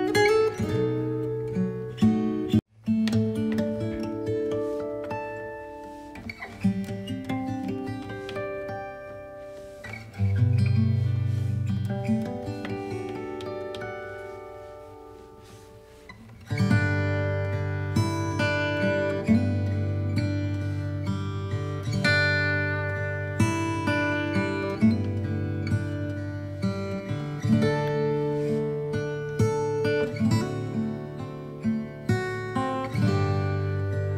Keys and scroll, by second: 0.2 Right, 1.1 b, 16.1 b.